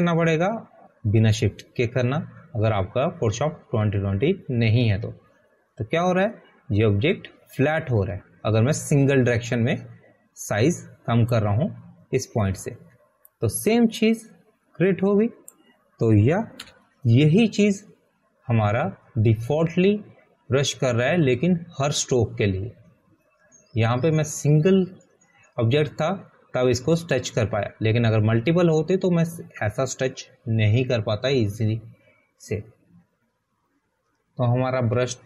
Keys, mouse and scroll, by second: 3.3 shift+click, 17.9 click, 21.1 Return.